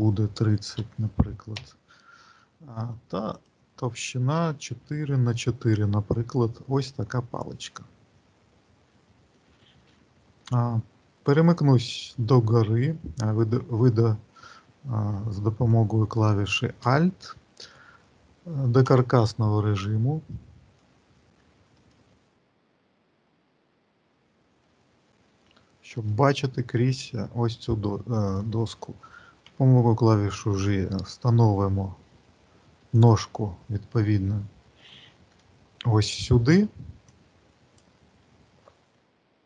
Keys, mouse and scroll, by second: 3.2 click, 6.8-8.2 scroll up 4, 15.2 alt+middle click, 15.9-18.4 scroll down 6, 18.7 click, 20.1 middle click, 21.6 alt+middle click, 22.4 alt+middle click, 23.9 shift+middle click, 24.2 shift+middle click, 24.9-25.7 scroll up 3, 26.1 shift+middle click, 28.2 click, 29.3 g, 33.9-35.1 scroll up 2, 35.1-36.9 scroll up 1, 36.9 click, 38.7 g.